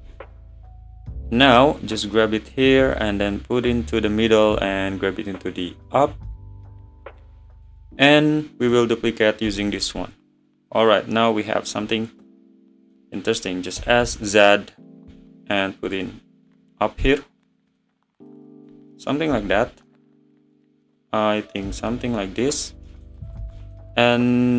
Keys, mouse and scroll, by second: 0.0 `, 0.6 scroll up 2, 1.5 click, 3.2 `, 4.3 click, 7.7 click, 8.2 click, 9.5 shift+d, 10.7 click, 11.3 click, 12.3-13.8 middle drag, 13.8 s, 16.5 `, 17.7 click, 19.3 s, 21.7-22.6 middle drag, 22.6 click, 22.9-23.3 middle drag, 23.3 click, 23.6-24.5 middle drag.